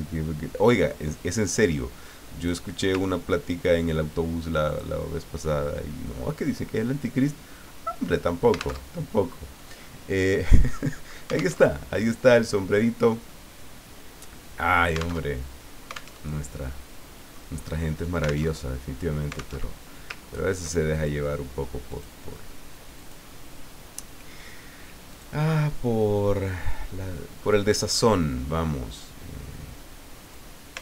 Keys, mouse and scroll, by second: 3.2-3.8 ctrl+scroll down 4, 4.7 click, 8.8 alt+Tab, 11.6 alt+Tab, 15.3 alt+Tab, 16.2 alt+Tab, 16.8 middle click, 17.1 click, 18.6 alt+Tab, 19.6 alt+Tab, 20.2-20.5 ctrl+scroll up 2, 20.9 ctrl+click, 21.9 click, 23.0 click, 25.1 click, 26.2-26.9 scroll down 2, 27.4-28.2 scroll up 2, 30.2 click.